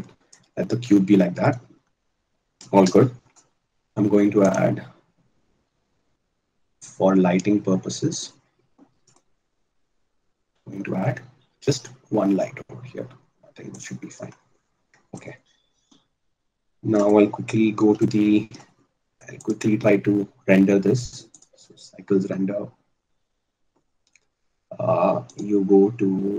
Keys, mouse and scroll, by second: 1.2 click, 2.7 a, 4.0 shift+a, 6.5 g, 12.8 s.